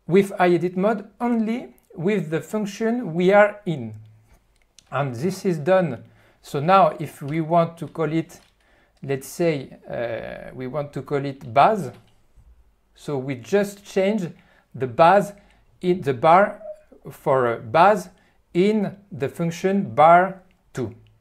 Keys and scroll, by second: 7.4 f, 7.8 f, 8.5 q, 11.1 BackSpace, 11.7 ..